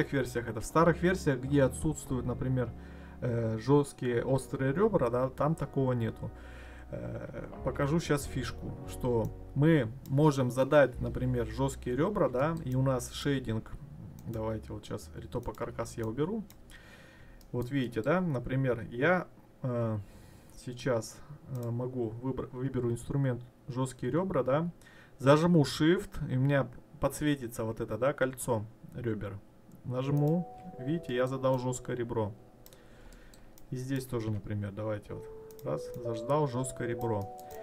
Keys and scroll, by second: 6.1 ctrl+z.